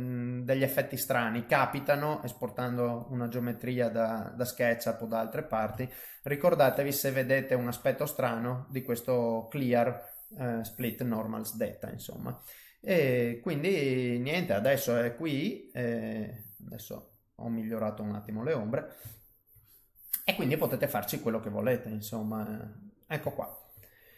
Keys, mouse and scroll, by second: 1.5 click, 2.1 middle click, 3.0 click, 5.1 click, 5.3 middle click, 5.8 ctrl+middle click, 6.6 middle click, 7.1 middle click, 7.2 middle click, 9.0 ctrl+middle click, 16.6 click, 16.6 middle click, 18.7 middle click, 19.5 shift+middle click, 19.8 shift+middle click, 20.8 click, 20.8 middle click, 22.4 middle click, 23.5 ctrl+middle click, 23.8 middle click.